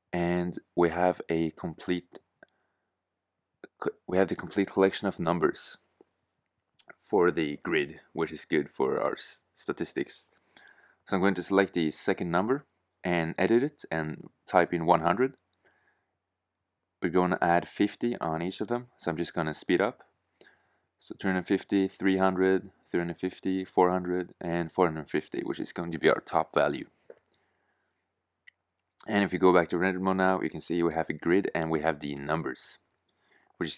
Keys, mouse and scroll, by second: 12.4 Tab, 13.1-14.1 typing, 15.0 Tab, 15.8 Tab, 16.1-16.5 typing, 16.7 Tab, 17.7 Tab, 17.8-19.4 typing, 18.2 Tab, 18.8 Tab, 19.6 Tab, 20.3 Tab, 20.5 Tab, 20.6-24.6 typing, 21.0 Tab, 21.6 Tab, 22.3 Tab, 22.8 Tab, 23.4 Tab, 24.1 Tab, 25.2 Tab, 27.8 shift+z.